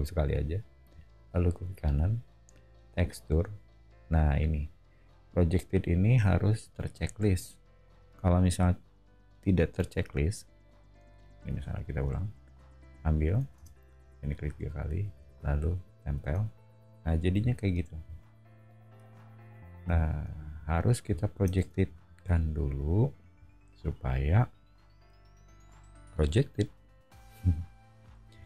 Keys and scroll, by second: 11.4 b, 13.5 space, 15.1 b, 16.2 space, 17.4 o, 21.6 space, 28.3 b.